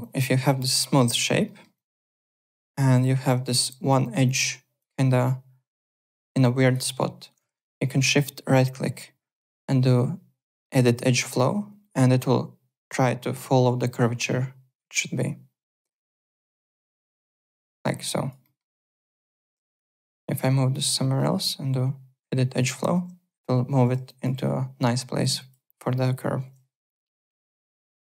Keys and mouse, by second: 0.0 alt+click, 1.4 alt+middle click, 1.7 alt+click, 2.4 alt+click, 3.4 alt+middle click, 3.6 alt+right click, 4.2 click, 5.2 click, 6.4 alt+click, 6.8 alt+middle click, 7.9 shift+right click, 15.7 click, 17.1 alt+click, 17.4 w, 17.7 alt+right click, 17.9 alt+click, 18.4 alt+middle click, 18.6 alt+right click, 18.8 alt+click, 19.7 click, 21.1 shift+right click, 23.8 w, 24.0 alt+click, 25.3 alt+click, 26.4 alt+Tab, 26.8 alt+click.